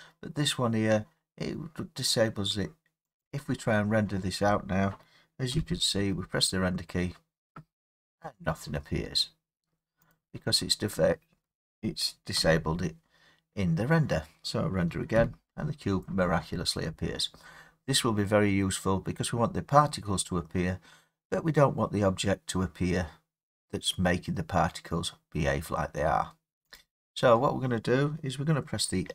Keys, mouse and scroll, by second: 3.2 click, 5.5 F12, 8.2 Escape, 10.1 click, 12.3 F12, 15.1 Escape, 26.7 click.